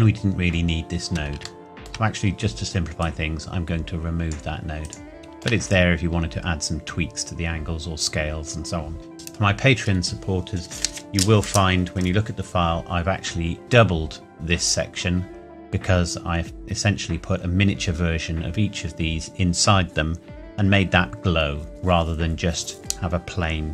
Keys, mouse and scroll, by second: 3.0 click, 5.2 shift+middle click, 6.6-8.5 scroll up 1, 9.1 ctrl+s, 13.0-14.5 scroll down 1, 16.2-18.3 scroll up 1.